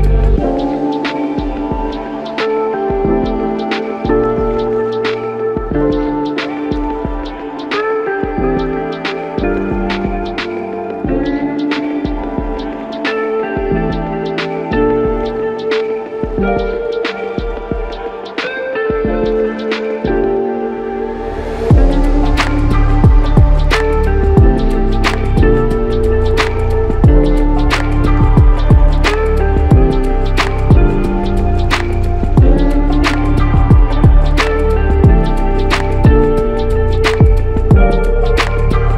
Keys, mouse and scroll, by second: 1.2 ctrl+click, 9.4 ctrl+click, 14.2 ctrl+click, 20.5 ctrl+click, 24.5 ctrl+click, 31.3 ctrl+alt+click, 31.4 ctrl+alt+click, 37.4 ctrl+alt+click.